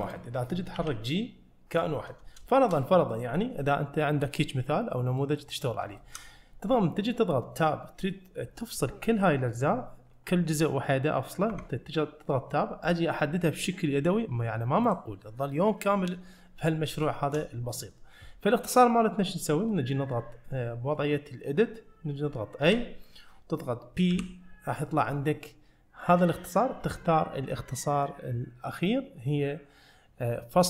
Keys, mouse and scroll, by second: 0.1 click, 0.8 g, 2.5 shift+middle drag, 3.1 middle click, 5.2 middle click, 5.7 scroll up 1, 6.0 shift+middle click, 8.2 middle click, 11.6 Tab, 12.4 middle click, 12.9 click, 14.9 click, 17.1-20.0 shift+middle drag, 22.7 a, 24.2 p.